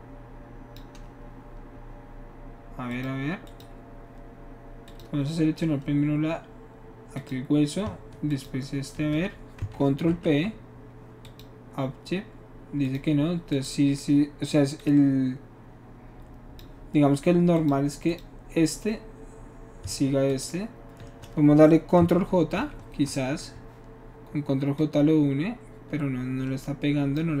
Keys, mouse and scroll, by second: 0.3 click, 2.9 click, 3.4 click, 4.8 click, 7.1 click, 8.3 shift+click, 10.0 ctrl+shift+p, 11.2 click, 12.9 click, 13.5 click, 14.8-16.6 drag, 17.5 click, 18.1 click, 20.3 shift+click, 22.5 ctrl+j, 24.8-25.3 drag.